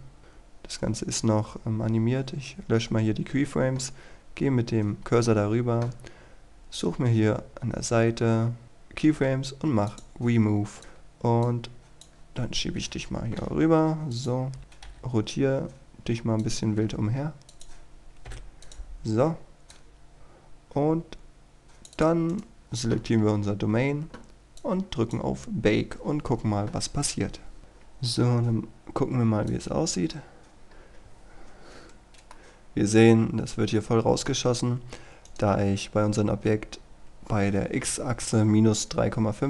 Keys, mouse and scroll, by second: 2.4-2.7 scroll down 1, 3.4 scroll up 1, 7.3-9.7 scroll down 1, 10.0 click, 13.5 a, 14.2 click, 14.6-15.0 typing, 16.5-22.1 drag, 22.4 right click, 24.7 click, 32.4-35.1 middle drag, 35.4 right click.